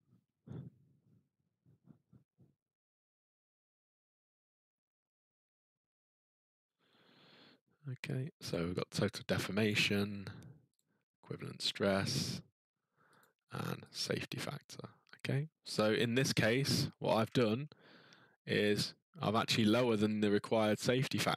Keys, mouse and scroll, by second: 8.5 click, 10.7 click, 13.2 click, 13.9 click, 17.1-17.6 ctrl+scroll, 19.6-20.5 scroll.